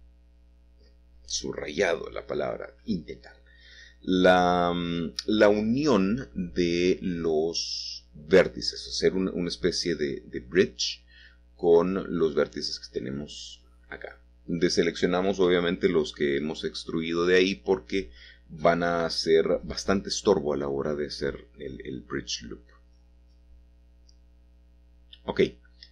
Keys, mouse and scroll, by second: 0.9 click, 2.2 1, 4.0 alt+shift+click, 6.7 alt+shift+click, 6.7 typing, 7.5-8.7 middle drag, 8.7 middle click, 11.1-12.2 scroll down 1, 11.2-12.7 middle drag, 12.2-12.7 scroll down 1, 12.7-14.2 scroll up 1, 14.2 middle click, 15.0 shift+click, 17.7 click, 22.8-25.9 middle drag.